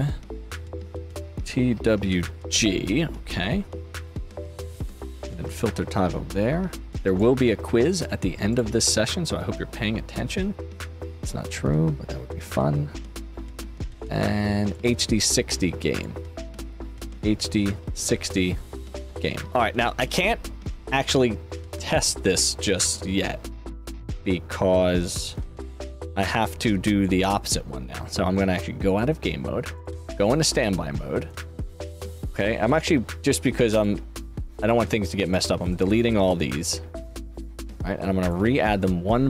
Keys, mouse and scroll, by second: 0.6 click, 1.7 shift+w, 2.5 shift+v, 4.9 click, 7.0 click, 8.4 click, 10.7 click, 12.4 click, 14.6 click, 15.9 click, 16.9 shift+d, 18.8 space, 19.7 click, 28.8 click, 29.7 click, 30.0 click, 31.2 click, 33.7 click, 33.7 right click, 34.5 click, 34.5 right click, 35.2 click, 35.2 right click, 35.6 click, 35.6 right click, 36.1 click, 36.1 right click, 37.0 click, 38.2 click.